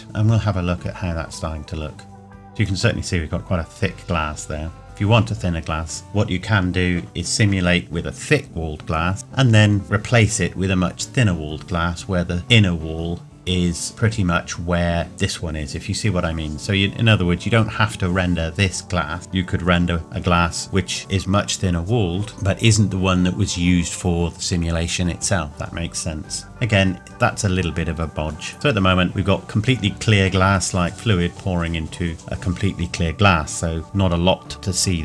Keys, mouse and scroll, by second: 0.0 click, 25.5 scroll up 1.